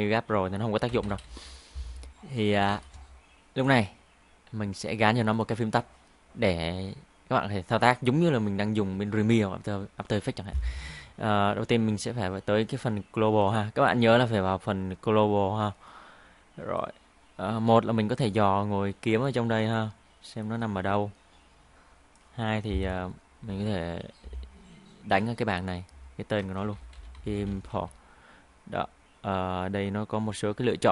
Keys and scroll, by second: 0.9 ctrl+i, 1.1 ctrl+i, 1.2 ctrl+i, 26.7 shift+i.